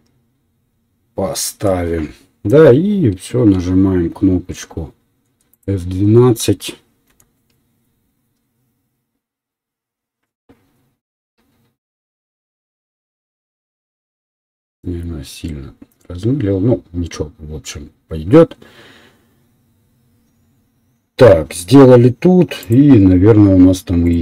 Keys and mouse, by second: 5.7-7.3 middle drag.